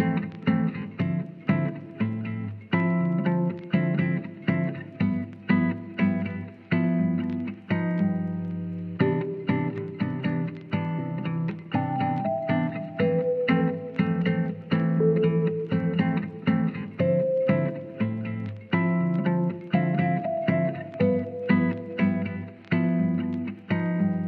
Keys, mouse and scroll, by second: 0.1 middle click, 1.1 Tab, 1.3 click, 1.7 shift+middle click, 2.1 middle click, 2.7 ctrl+s, 4.0 Tab, 4.2 click, 5.1-6.1 drag, 6.8 click, 7.8 Tab, 8.0 click, 8.2 Tab, 9.6-10.7 drag, 11.5-11.9 drag, 13.0 click, 15.6 middle click, 16.6 click, 17.6-18.4 drag, 19.8 click, 20.9-21.3 drag, 21.3-22.9 middle drag, 23.3 shift+middle drag, 23.7-24.1 middle drag.